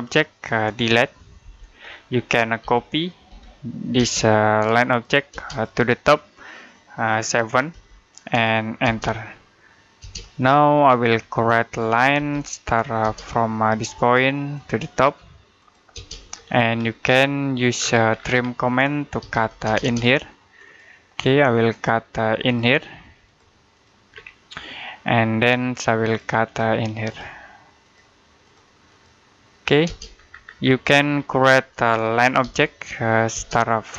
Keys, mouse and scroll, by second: 1.3 Delete, 2.4-3.8 typing, 4.4 click, 5.1 space, 5.3 click, 7.6 7, 8.7 space, 10.4 middle click, 11.0 scroll up 1, 12.0 l, 12.8 space, 14.4 click, 15.8 space, 16.0-16.6 scroll up 1, 17.6-18.0 scroll down 1, 18.8-19.7 typing, 19.9 click, 23.9-24.3 scroll down 1, 24.3 middle click, 25.0-25.9 scroll up 1, 25.9 click, 29.7 space, 30.0-31.3 scroll down 1, 31.3 middle click, 32.3 l, 33.2 space.